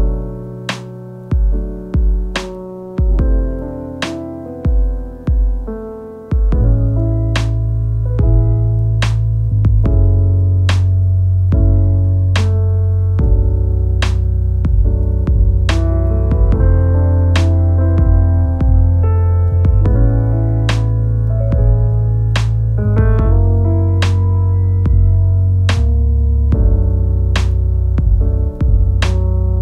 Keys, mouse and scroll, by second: 0.1-2.6 middle drag, 2.6 click, 2.9-3.8 middle drag, 3.8 click, 6.0-6.6 middle drag, 6.6 Tab, 6.8-7.4 scroll up 1, 7.5 alt+click, 8.2-10.2 middle drag, 10.6 i, 13.8 s, 17.3 i, 19.5 Tab, 20.0 click, 21.5 Tab, 22.2 click, 25.3 Tab, 25.8 click, 26.7 Tab, 27.4 ctrl+r.